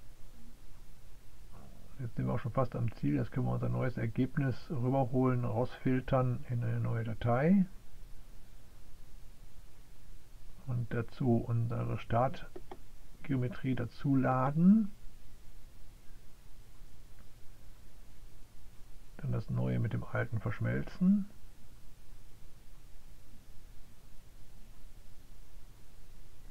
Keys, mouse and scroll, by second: 1.3 click, 3.2 click, 3.8 click, 4.8 click, 5.3 click, 6.7 click, 7.2 click, 10.3 click, 11.0 click, 11.8 click, 12.7-14.5 scroll up 1, 14.5-15.1 scroll up 1, 15.9 click, 17.0 click, 19.4 click, 21.1 click, 22.9 click, 23.9 click, 26.1 click.